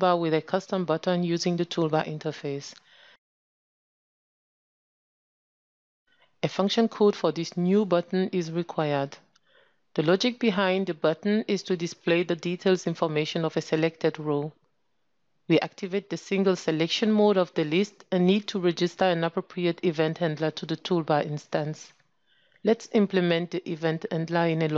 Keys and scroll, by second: 3.9 ctrl+space, 16.5 ctrl+shift+<, 22.6 ctrl+space.